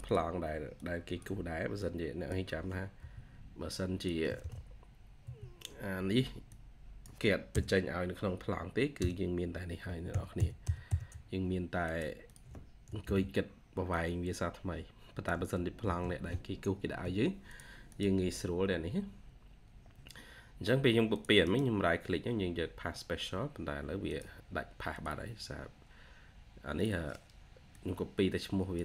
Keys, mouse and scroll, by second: 2.9 typing, 5.1 typing, 8.9 typing, 10.0 alt+0, 10.2 alt+1, 12.1 double click, 12.9 ctrl+c, 16.6 Escape, 16.9 Escape, 17.8 double click, 18.2-18.6 scroll down 1, 19.1 scroll up 1, 20.6-21.3 scroll down 1, 21.3 right click, 25.5-26.5 scroll up 1.